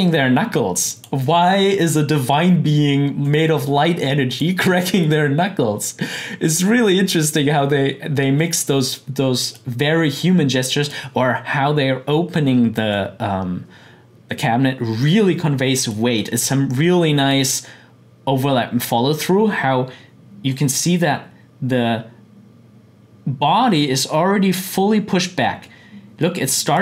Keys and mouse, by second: 0.9-4.3 drag, 8.4-12.7 drag, 15.9 click, 20.4-26.8 drag.